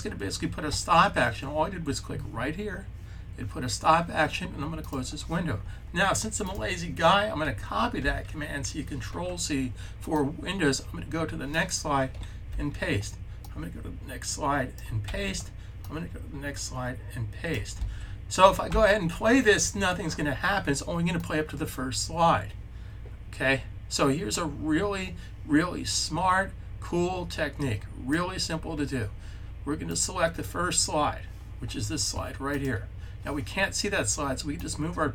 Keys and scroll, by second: 7.9 super+c, 12.3 super+v, 14.9 super+v, 17.6 super+v.